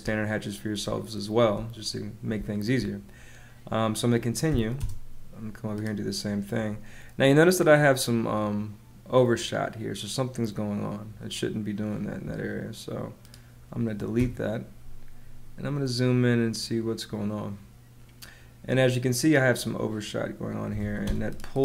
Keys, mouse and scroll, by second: 0.8 space, 2.3 space, 4.4 h, 4.7 space, 12.0 Escape, 14.1 BackSpace, 20.4-21.2 typing.